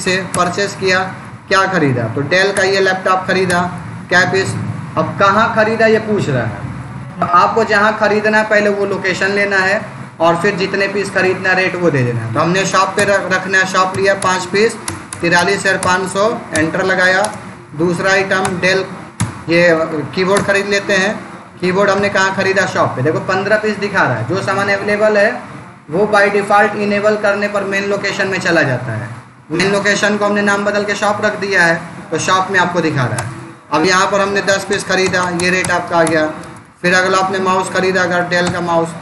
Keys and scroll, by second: 0.8 space, 1.1 Down, 2.4 Return, 3.3 space, 3.6 Down, 4.2 Up, 12.8 Return, 13.8 5, 14.1 Return, 17.1 space, 17.4 Down, 18.3 Return, 19.0 BackSpace, 19.6 Down, 20.2 Return, 20.9 space, 21.3 Down, 21.8 Up, 33.0 Return, 34.1 1, 34.6 Return, 36.3 space, 36.5 Down, 38.3 Return.